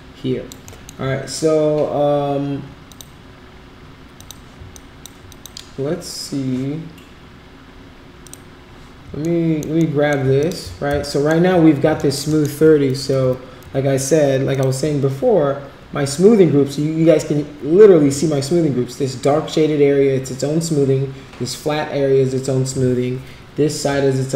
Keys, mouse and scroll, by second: 0.7 alt+middle click, 2.9 click, 4.1 click, 4.7 alt+click, 5.3 click, 8.2 click, 9.2 alt+middle click, 9.9 alt+middle click, 10.4 click, 10.6 z, 11.0 alt+middle click, 12.0 alt+middle click, 12.4 alt+middle click, 13.0 F4, 13.2 F3, 13.6 F3, 14.5 click, 14.8 F4.